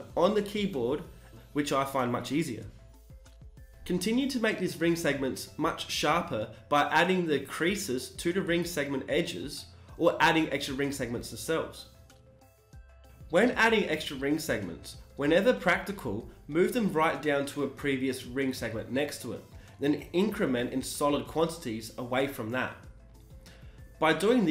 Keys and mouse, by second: 5.8 click, 6.8 g, 8.1 ctrl+r, 11.2 g, 13.2 Tab, 15.3 shift+e, 18.4 click, 19.3 ctrl+r, 19.3 click, 20.6 g, 22.7 click, 22.9 Tab, 24.1 click.